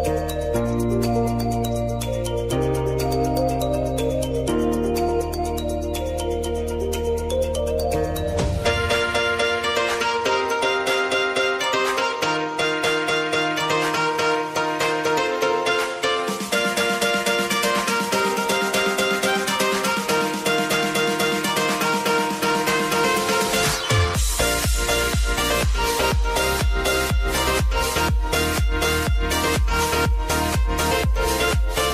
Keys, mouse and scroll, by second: 0.3 ctrl+alt+Home, 1.7 click, 5.2 F4, 5.9 click, 8.4 s, 9.3 click, 10.1 Return, 11.0 click, 11.5 typing, 13.1-18.8 drag, 18.8 j, 19.2 space, 20.8 click, 22.0 j, 22.6 space, 25.2 click, 26.0 t, 26.7 click, 27.6 Return, 29.2 click, 31.2 Return, 31.4 click.